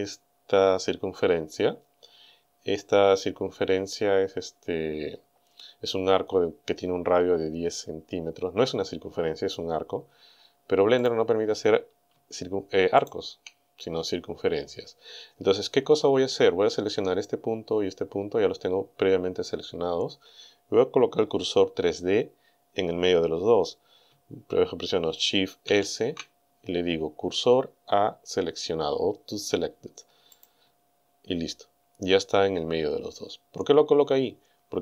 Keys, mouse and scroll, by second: 11.1 right click, 13.0 shift+right click, 25.7 shift+s, 30.4 click.